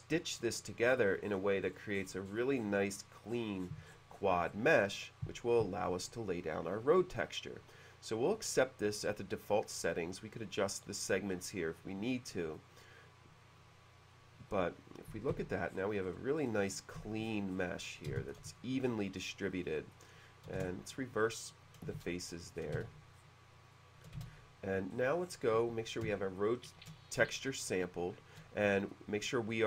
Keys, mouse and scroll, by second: 0.9-2.9 scroll up 5, 3.3-5.1 scroll down 4, 12.6 click, 14.6-15.0 middle drag, 15.4 h, 15.7-16.0 scroll up 1, 16.4 middle click, 17.0 h, 17.3 middle click, 18.1 space, 18.3 click, 18.9-19.2 middle drag, 19.2 click, 19.6 click, 20.0 click, 20.6 shift+f, 21.4 middle click, 22.0-24.3 typing, 22.3-22.6 scroll down 1, 22.8-23.4 shift+scroll down 2, 23.8 middle drag, 24.9-25.5 scroll up 1, 25.6 b, 26.4 shift+click, 27.4-28.9 shift+middle drag.